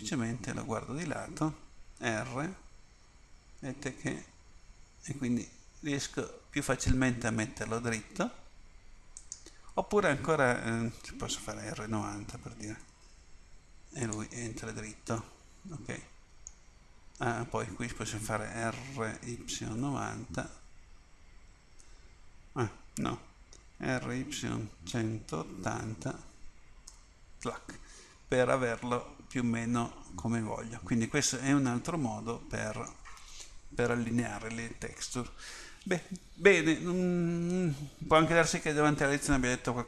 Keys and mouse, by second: 0.0 KP_3, 2.0 r, 12.4 r, 15.5 middle click, 19.1 r, 23.9 r.